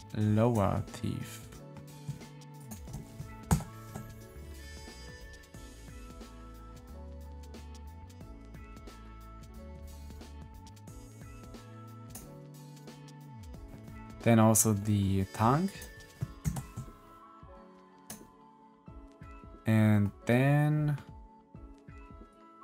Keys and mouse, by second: 0.8 middle click, 3.4 ctrl+l, 5.0 middle click, 5.8 click, 6.3-7.5 middle drag, 15.5 click, 16.4 ctrl+l, 19.3-20.5 middle drag, 20.5-22.6 middle drag.